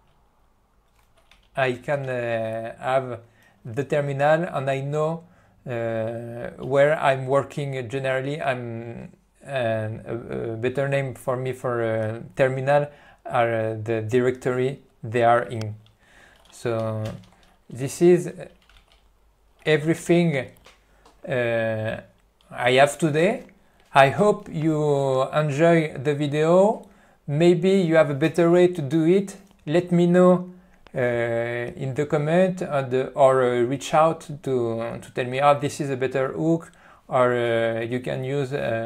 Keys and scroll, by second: 17.1 ctrl+g, 17.8 Left, 19.1 ctrl+e, 20.1 Return.